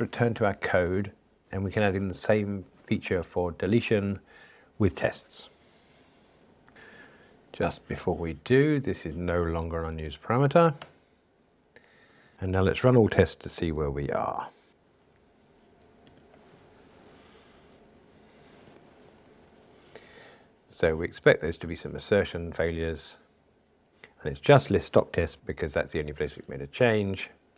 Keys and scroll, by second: 9.6 alt+Return, 14.7 ctrl+alt+r, 20.1 super+4.